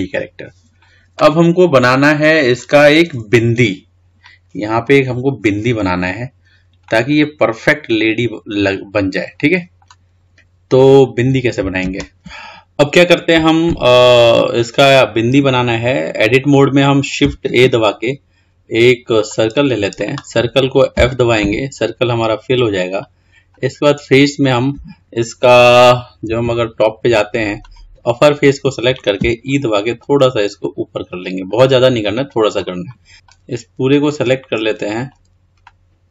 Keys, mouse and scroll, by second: 0.2-2.1 scroll up 3, 2.1-3.9 scroll up 7, 7.7-10.8 middle drag, 12.0 click, 17.7 shift+a, 21.1 f, 24.1 Left, 26.4 KP_8, 27.7 click, 29.3 e, 32.8 click, 33.4 click, 35.8-36.1 middle drag.